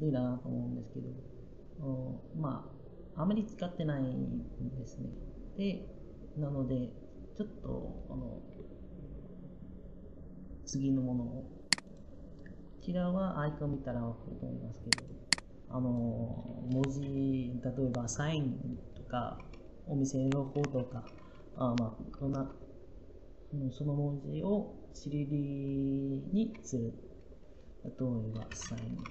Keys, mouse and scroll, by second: 21.9 BackSpace, 28.0-29.1 typing.